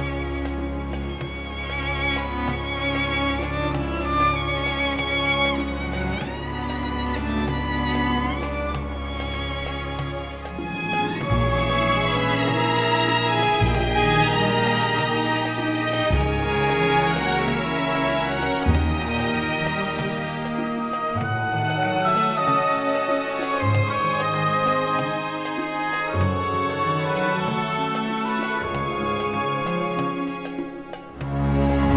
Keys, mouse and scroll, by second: 0.4 click, 3.5-4.0 scroll down 2, 10.4 click, 13.7 click, 15.1 click, 17.1 click, 19.3 click, 21.0 4, 21.9 0, 22.6 click, 30.2 click, 30.6-31.0 scroll down 1, 31.1 click.